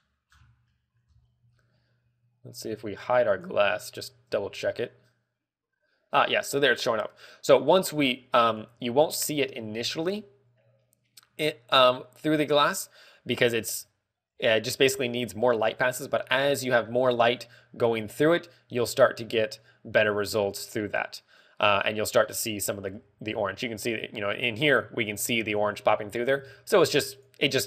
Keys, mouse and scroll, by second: 0.8-1.2 scroll down 5, 1.2 middle click, 1.6-2.3 scroll up 9, 3.3 z, 4.1 right click, 4.9 h, 9.0 click, 10.4 alt+h, 11.5 scroll down 2, 11.7 scroll up 2, 17.9 click.